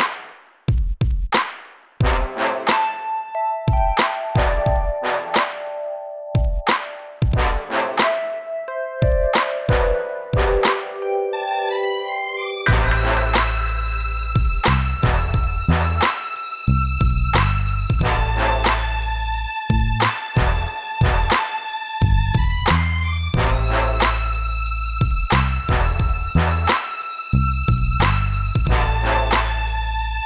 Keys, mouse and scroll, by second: 5.2 scroll up 2, 7.0 scroll up 2, 10.3 scroll down 2, 12.7 click, 14.8 click, 15.9 scroll up 2, 20.1 scroll up 2, 22.8 click, 23.3 click, 24.6 middle click, 25.5 middle click, 26.1 scroll up 2, 26.3 right click, 27.3 click, 28.4 click, 29.4 click.